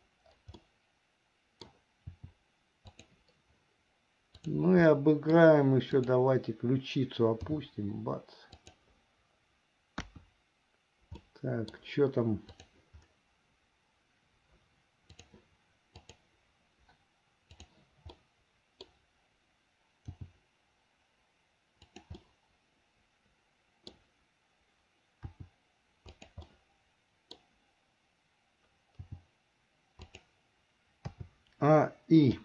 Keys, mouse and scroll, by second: 0.7-1.9 middle drag, 2.3 r, 4.5 click, 5.1 middle click, 6.1 click, 7.7 g, 10.1 KP_1, 11.3 middle click, 12.7 click, 15.2 click, 16.2 click, 17.7 click, 18.3 middle click, 20.1 g, 22.4-24.1 middle drag, 25.4 r, 26.7 middle click, 29.2 g, 31.3 a.